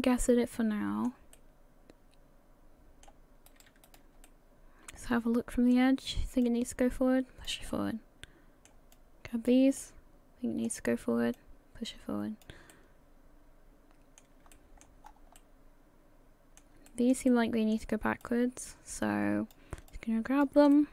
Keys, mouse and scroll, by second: 1.3 middle click, 3.5 right click, 3.9 shift+right click, 4.2 middle click, 6.4 click, 7.7 middle click, 8.9 click, 9.8 middle click, 11.4 click, 12.7 middle click, 14.5 shift+middle click, 15.0-15.5 scroll up 3, 15.4 middle click, 16.9 shift+middle click, 17.3 middle click, 18.2 click, 19.9 shift+click, 20.7 middle click.